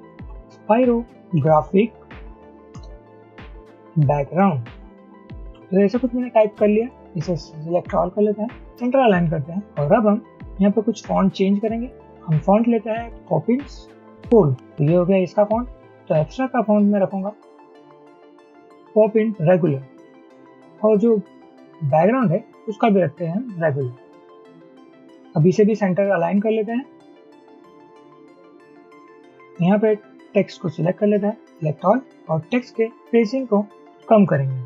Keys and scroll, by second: 0.0-5.6 typing, 2.9 Return, 12.8-13.5 typing, 30.0 typing.